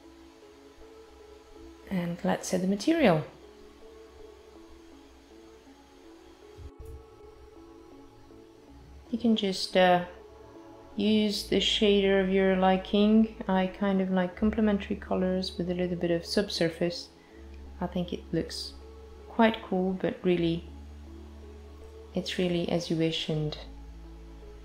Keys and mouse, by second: 2.0 click, 4.0 click, 6.8 click, 10.3 click, 14.5 click, 20.3 click, 24.0 space.